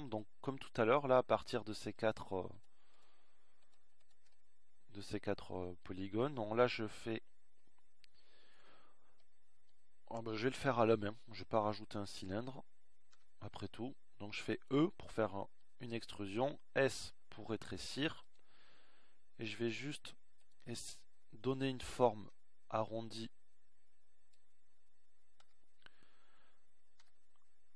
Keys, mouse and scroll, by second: 7.5-14.2 middle drag, 15.9 e, 19.5 s.